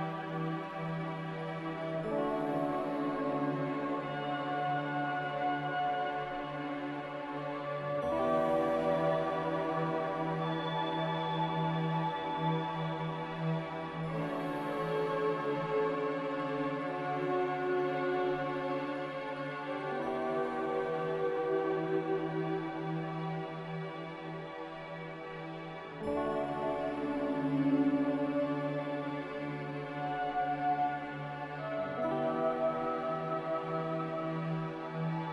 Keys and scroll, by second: 3.7 x, 4.5 z, 6.6 typing, 7.7 Return, 9.4 g, 12.0 z, 15.1 a, 16.0 ctrl+c, 17.0 ctrl+z, 17.3 ctrl+z, 20.7 ctrl+v, 29.4 n, 35.2 z.